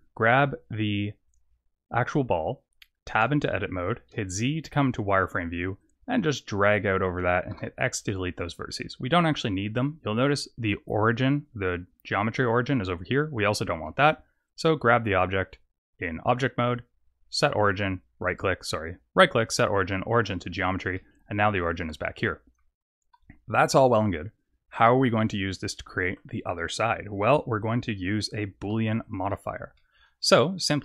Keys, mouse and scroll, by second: 0.8 click, 1.2 click, 3.1 Tab, 4.1 z, 5.8 click, 7.5 x, 13.8 Tab, 15.8 right click, 20.9 middle click, 22.1 middle click, 24.8 middle click, 28.3 z, 29.0 click, 29.3 middle click, 29.7 middle click.